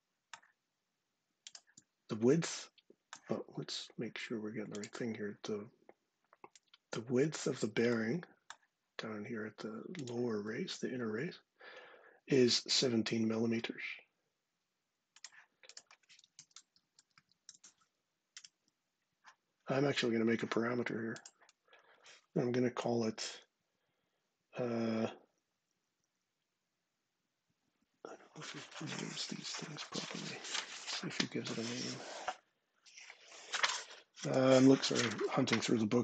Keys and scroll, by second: 15.9-17.8 typing, 18.2 Return.